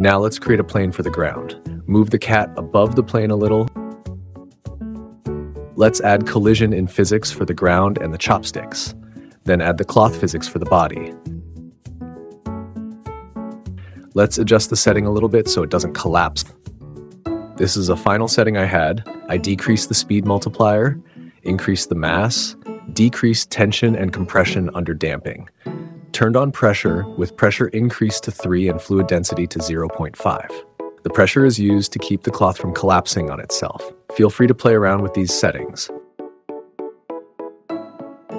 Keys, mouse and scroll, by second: 0.0 shift+a, 1.0 shift+a, 1.3 s, 2.6 g, 2.8 z, 6.2 click, 6.7 click, 8.5 click, 9.1 click, 10.8 click, 15.1 click, 17.8 click, 25.8-26.6 drag, 26.9 click, 31.7 click, 32.2 space, 34.0 space, 36.5 space, 37.2 click.